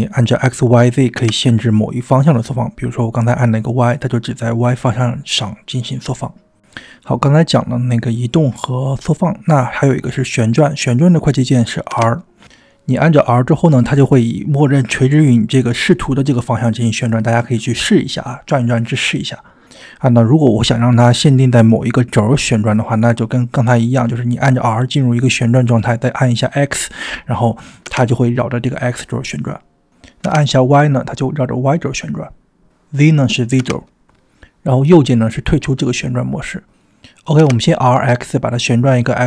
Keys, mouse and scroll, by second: 0.0 s, 9.6-10.9 middle drag, 10.9-11.6 scroll up 2, 11.8 r, 15.7-16.2 drag, 15.7 middle click, 16.4 r, 19.1-19.7 drag, 19.1 middle click, 19.7 middle click, 20.2 r, 22.4 click, 22.4 middle click, 24.7 click, 24.7 r, 37.4 r.